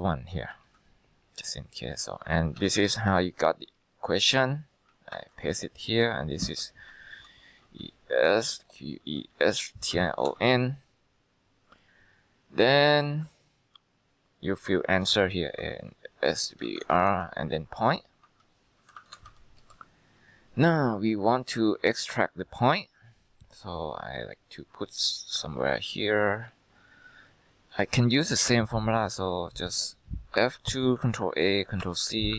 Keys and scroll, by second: 0.0-0.4 typing, 0.6 ctrl+Return, 2.7 ctrl+x, 2.7-3.5 typing, 4.5-5.2 typing, 6.8-10.9 typing, 14.2-19.9 typing, 30.5 F2, 31.3 ctrl+a, 31.9 ctrl+c.